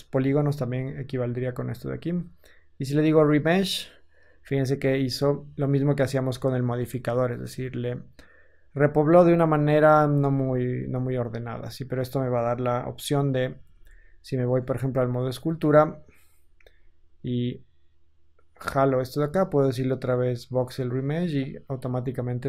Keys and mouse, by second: 6.7 Tab, 7.3 Tab, 10.1 Tab, 10.5 Tab, 13.7 ctrl+Tab.